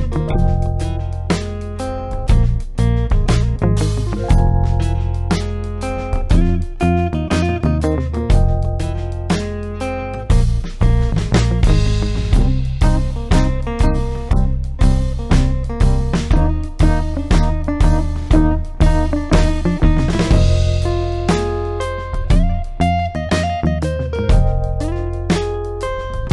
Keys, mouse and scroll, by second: 0.7 click, 4.1 click, 7.2 alt+click, 8.4 click, 12.1 click, 14.7 space, 15.6 ctrl+click, 23.9 click.